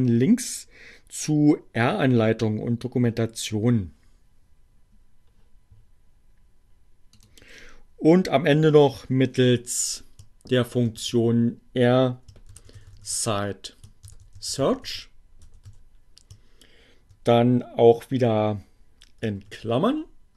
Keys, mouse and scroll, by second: 6.9 click, 10.0 shift+r, 12.3-15.6 typing, 17.9 shift+8.